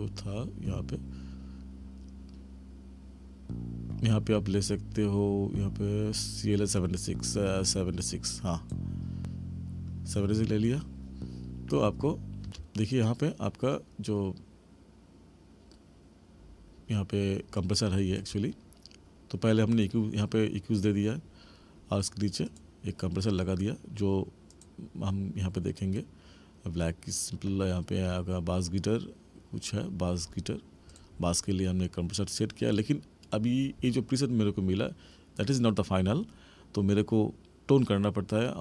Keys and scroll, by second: 12.4 space.